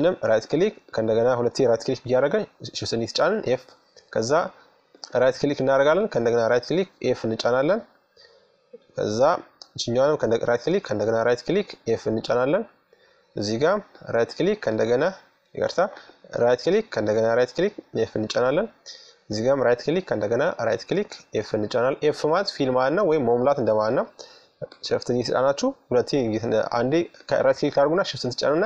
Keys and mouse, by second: 0.8 f, 3.5-6.1 right drag, 5.5 f, 6.2 right click, 7.4 middle click, 8.7-11.4 right drag, 10.6 f, 12.6-17.4 right drag, 16.4 f, 17.9-20.7 right drag, 19.8 f, 22.0-24.8 right drag, 24.2 f, 25.8-28.6 right drag, 28.4 f.